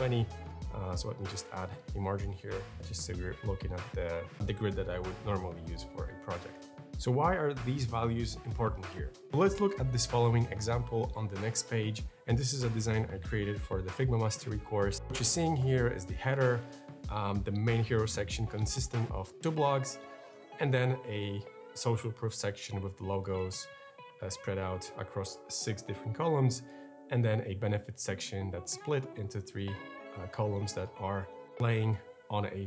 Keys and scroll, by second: 1.0-1.9 typing.